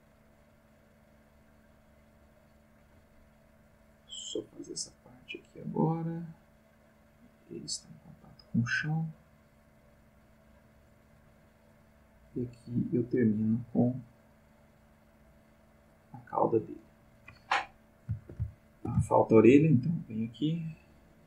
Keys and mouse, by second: 0.6-2.8 drag, 3.9-11.4 drag, 12.6-17.2 drag, 18.4-19.7 ctrl+shift+middle drag, 20.2-21.2 drag.